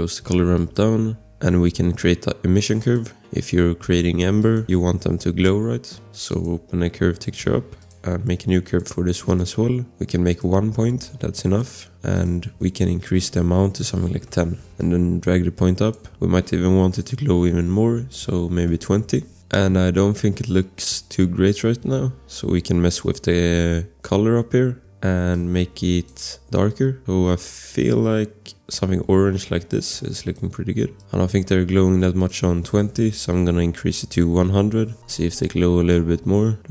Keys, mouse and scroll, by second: 0.6 click, 2.8 click, 5.2 scroll, 6.3 click, 10.0 scroll, 10.3 click, 12.1 click, 13.5-14.4 typing, 14.8 click, 16.9 click, 18.4-19.3 typing, 19.4 scroll, 26.7 click, 31.0 click, 31.5 ctrl+z, 32.2 click, 33.8-34.7 typing, 35.9 click.